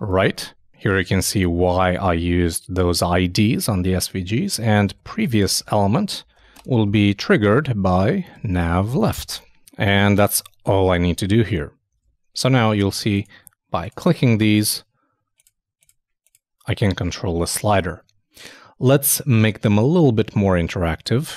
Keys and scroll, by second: 5.1-6.8 typing, 8.0 shift+3, 8.3 shift+n, 10.2 super+s, 12.0 super+Tab, 20.3 super+Tab.